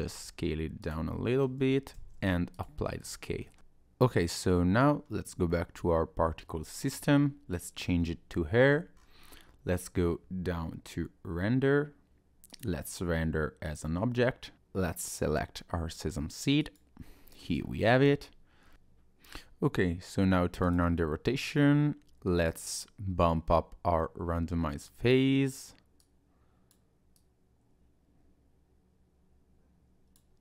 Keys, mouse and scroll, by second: 0.1 s, 1.1 middle click, 1.9 ctrl+a, 2.9 scroll down 3, 3.1 click, 3.4 shift+middle click, 3.6 click, 5.0-5.5 scroll down 1, 5.5 middle click, 6.7 shift+middle click, 7.6 click, 8.0 scroll up 1, 8.7-9.5 scroll down 6, 12.5 click, 14.5-15.1 scroll up 1, 15.1 click, 17.2-18.7 scroll up 2, 18.7 scroll up 1, 18.7 ctrl+z, 20.7 click, 22.5 click, 24.0 click, 26.0 click, 27.1 click, 28.6 click.